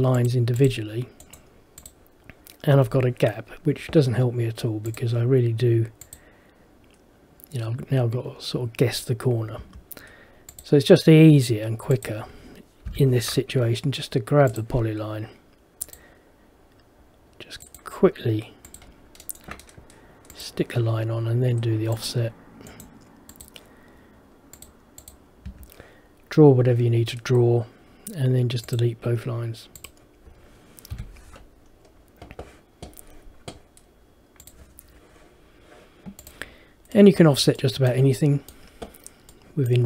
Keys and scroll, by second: 9.7 Escape, 13.0 Delete, 25.6 Escape, 31.1 Delete.